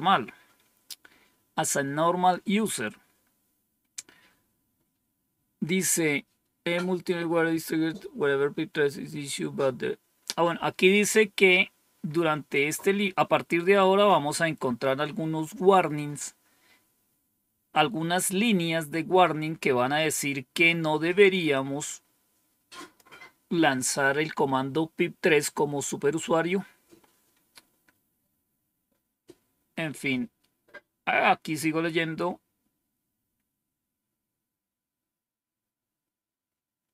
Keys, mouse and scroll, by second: 21.4-22.9 drag.